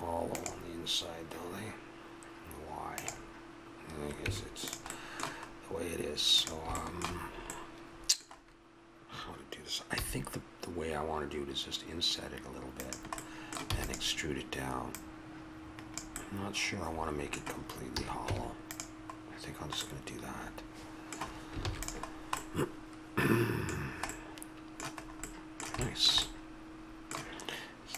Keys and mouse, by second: 4.2 Tab, 4.9-6.3 middle drag, 6.3 right click, 7.3-9.9 middle drag, 13.2 middle click, 13.7 e, 16.2 middle click, 16.4 click, 16.8 middle click, 17.9 a, 18.3 Tab, 19.2 middle click, 21.6 ctrl+s, 22.4-23.5 middle drag, 25.0 middle click.